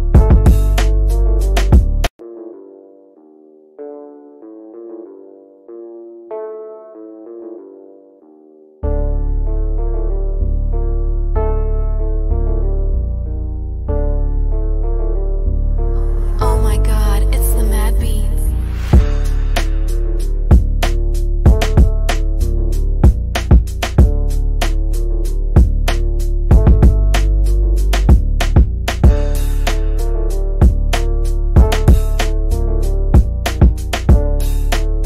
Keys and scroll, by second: 33.3 F3.